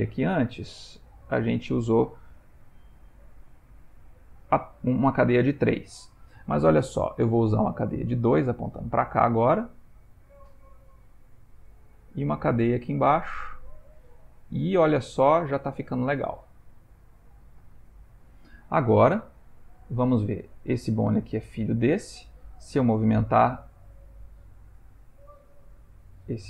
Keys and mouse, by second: 1.4 click, 8.7 click, 9.4 g, 12.2 click, 12.5 g, 19.7 click, 22.7 click, 23.2 g.